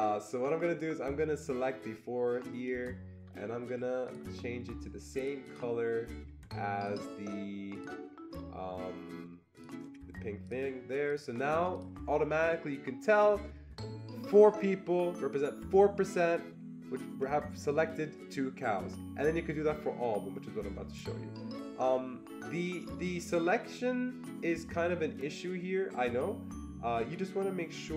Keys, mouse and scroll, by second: 1.4-5.1 drag, 5.1-6.2 drag, 6.2 click, 7.1 click, 7.8 click, 9.5 click, 10.5 click, 11.1 click, 11.7-14.2 click, 23.0-27.9 drag, 23.1-23.8 typing.